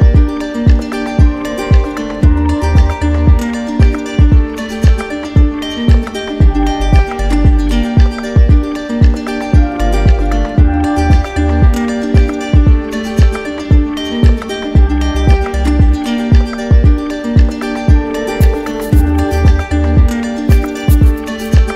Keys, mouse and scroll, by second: 4.0 right click, 4.6-5.6 shift+right drag, 6.0-7.5 drag, 7.5-8.6 alt+right drag, 8.8-11.8 right drag, 12.3 click, 13.3-15.0 right drag, 15.0 click, 15.6 right click, 16.5-17.5 drag, 17.8-18.8 drag, 18.8-19.8 right drag.